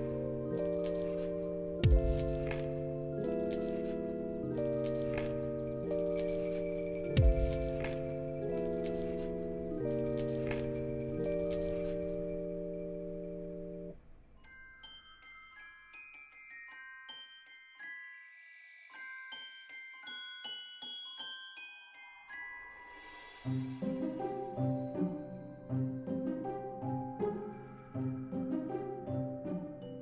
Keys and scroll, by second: 4.7 ctrl+s, 7.2 ctrl+s, 9.3 t, 11.3 alt+x, 12.8 z, 13.8 0, 14.0 Return, 15.6 ctrl+s, 29.3 Return.